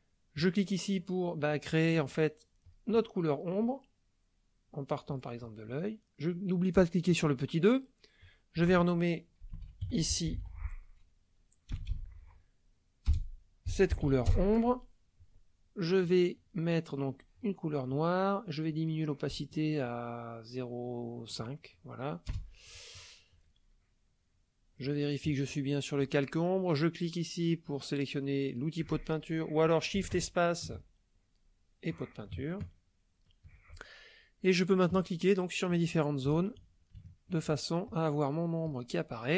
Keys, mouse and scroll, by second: 0.3 click, 2.6 click, 3.6 click, 5.1 click, 7.3 click, 9.4-10.4 typing, 11.7 BackSpace, 13.0 BackSpace, 14.0 r, 14.1 e, 14.3 Return, 16.0 click, 17.2 click, 18.7-21.7 drag, 22.3 Return, 24.9 click, 30.2 shift+space, 32.3-33.4 shift+drag, 34.9 click, 36.2 click, 37.0 shift+click, 37.9 shift+click, 38.6 click.